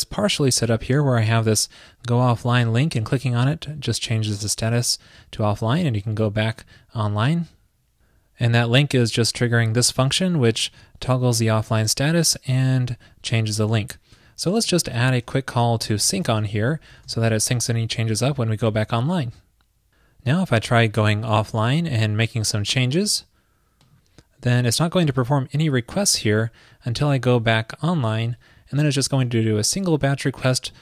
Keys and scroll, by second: 17.1 super+s.